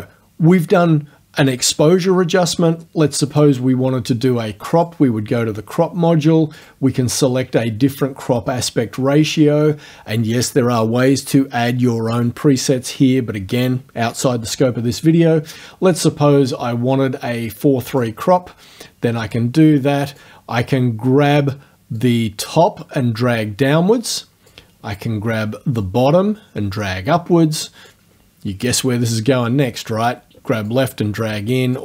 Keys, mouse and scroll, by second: 3.3 click, 4.8 click, 6.6 click, 17.9 click, 19.4 click, 22.0-24.7 drag, 25.8-28.1 drag, 30.7-31.8 drag.